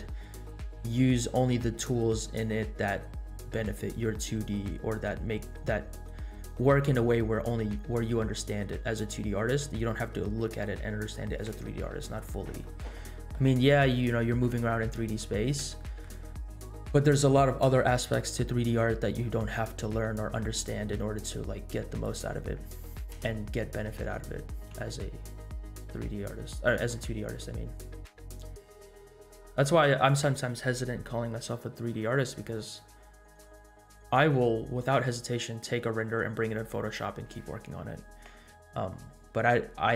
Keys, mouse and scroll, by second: 12.7-13.3 middle drag, 15.4 scroll up 1, 15.7-16.1 shift+middle drag, 16.2 scroll up 2, 16.7-17.0 middle drag, 20.1-20.6 scroll down 1, 20.6 scroll down 2, 21.2 scroll down 1, 22.0 click, 23.1 KP_0, 24.8 space, 27.1-27.9 scroll up 6, 35.0 space, 38.4-39.1 scroll down 4, 39.6 scroll up 2.